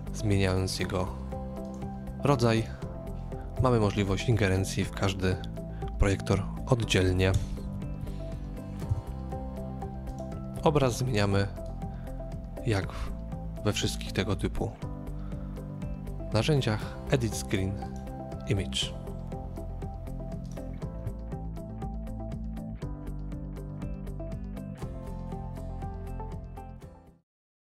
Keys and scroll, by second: 3.6 KP_3, 7.4 KP_0, 8.9 KP_3.